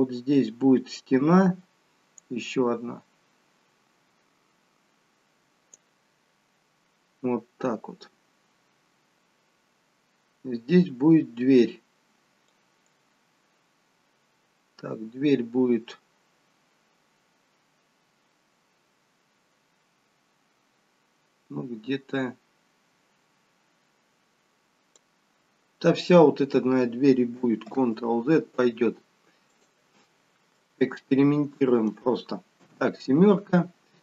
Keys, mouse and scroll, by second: 12.5 click, 27.6 ctrl+z, 29.4 click, 30.5 middle click, 32.6 KP_7.